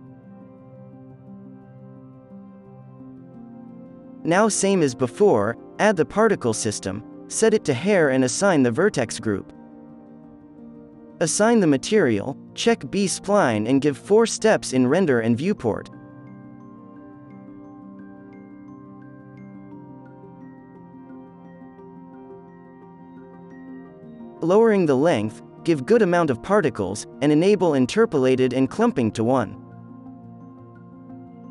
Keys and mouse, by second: 0.0 ctrl+z, 0.2 f, 1.3-2.7 middle drag, 1.9 f, 2.7 right click, 3.0 f, 7.7-9.0 right drag, 9.0 middle click, 9.1-24.4 drag, 9.1 right click, 14.8 KP_4, 23.3 right click, 23.7 KP_1, 24.7-26.4 drag, 25.8-27.9 middle drag, 27.4-29.2 drag, 27.4 right click, 27.9 KP_0, 29.3-31.5 drag, 31.4-31.5 right drag.